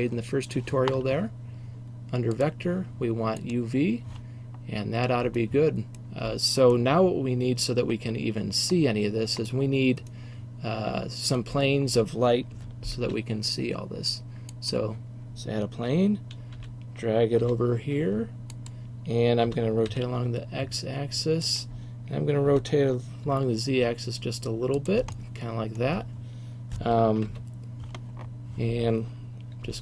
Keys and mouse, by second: 8.9-10.4 middle drag, 13.1 shift+a, 16.6 g, 18.7 click, 19.6 r, 20.0-21.5 drag, 21.7 click, 22.6 r, 23.4-23.8 middle drag, 25.0-26.1 middle drag, 27.3 KP_7, 29.7 g.